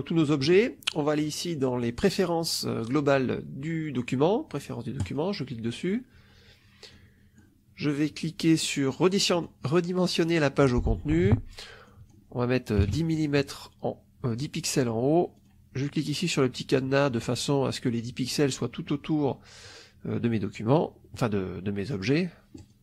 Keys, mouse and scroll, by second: 4.9 click, 6.8 click, 9.2 click, 11.8 click, 12.7 1, 15.3 click, 22.4 click.